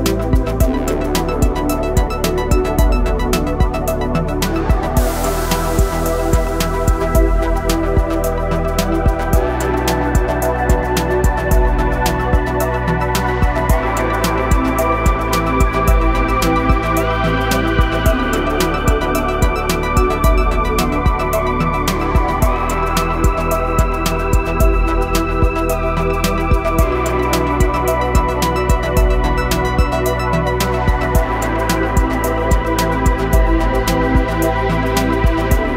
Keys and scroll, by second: 25.8 s, 30.3 s.